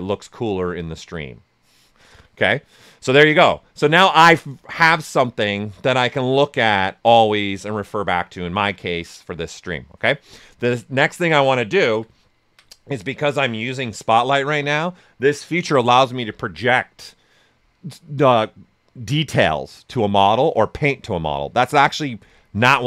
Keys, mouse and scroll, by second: 10.9 ctrl+alt+right click.